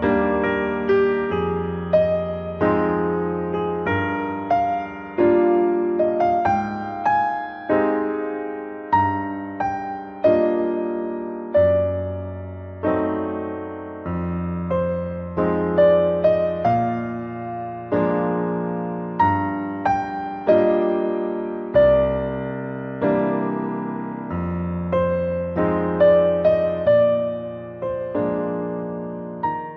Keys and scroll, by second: 23.7 ctrl+t.